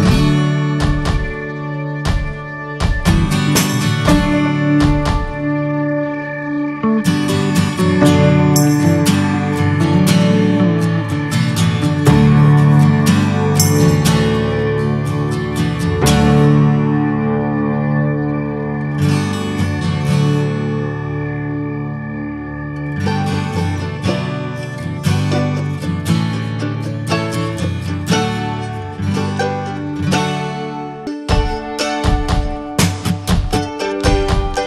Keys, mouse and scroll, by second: 0.1 shift+middle click, 2.1-8.9 drag, 8.9-10.5 shift+middle drag, 10.5 click, 10.9 ctrl+z, 13.3-16.9 drag, 16.9 ctrl+z, 17.2-19.6 drag, 19.6 ctrl+z, 20.7 click, 21.0 scroll down 1, 21.5 shift+middle click, 22.0 scroll up 3, 22.3 shift+middle click, 22.5 scroll down 2, 22.7 middle click, 22.9-23.8 scroll up 2, 23.1 shift+middle click, 23.8-26.6 shift+middle drag, 26.6 click, 27.3 ctrl+z, 29.9-34.6 drag.